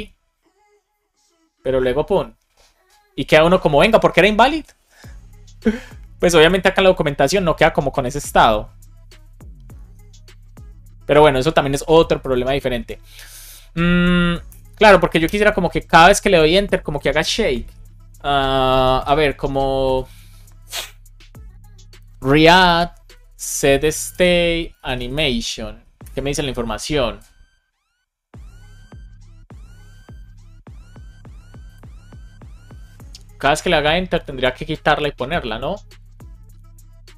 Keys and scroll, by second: 14.4 Return, 15.1 Return, 22.6 space, 25.9 Return.